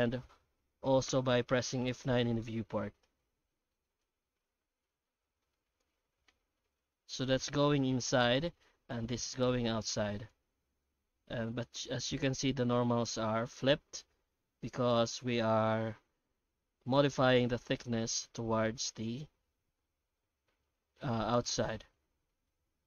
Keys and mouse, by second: 1.6 F9.